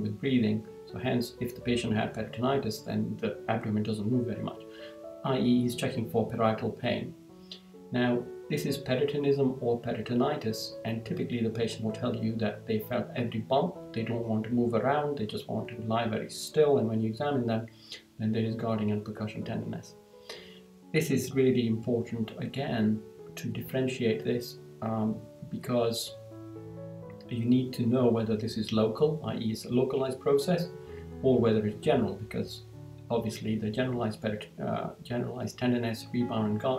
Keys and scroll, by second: 6.9 Down, 26.0 Down, 30.4 Down.